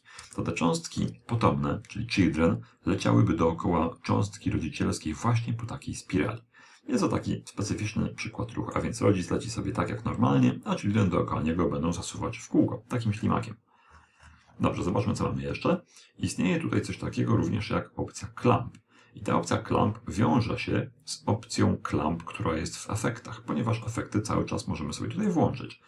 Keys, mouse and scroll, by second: 7.3-7.7 scroll down 1, 7.7-9.4 middle drag, 13.9-16.4 scroll up 1, 16.4-18.3 scroll up 1, 23.9-25.7 middle drag.